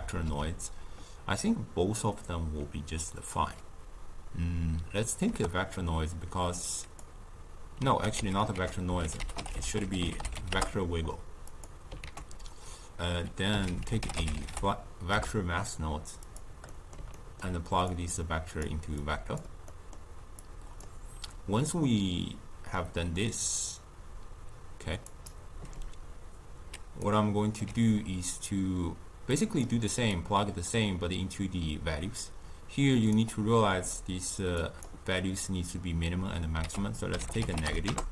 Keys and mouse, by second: 8.1 x, 8.5 ctrl+a, 10.1 g, 12.0 ctrl+a, 16.7-17.8 middle drag, 17.8 drag, 19.0-19.7 drag, 19.7-20.3 middle drag, 20.3 click, 23.5-26.8 drag, 26.8 d, 27.0 right click, 27.6 d, 27.6 d, 29.3-33.1 drag, 34.6-36.6 drag, 36.6 ctrl+a.